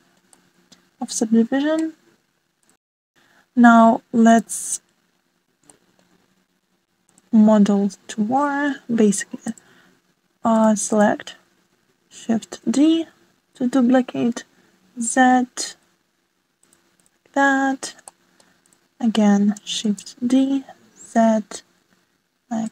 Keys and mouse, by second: 2.9 click, 4.3-4.7 shift+middle drag, 5.6 click, 8.0 click, 9.5 click, 11.0 shift+d, 16.7-17.0 shift+middle drag, 18.4 shift+d, 22.4-22.7 middle drag.